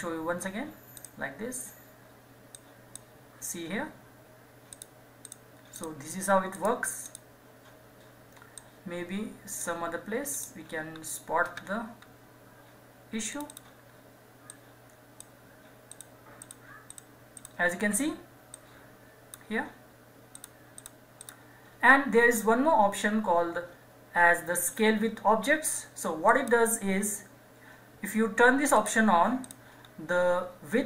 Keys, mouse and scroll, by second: 10.9-11.9 scroll down 1, 13.3 click, 26.3 click, 28.7 click, 29.8-30.8 scroll down 1.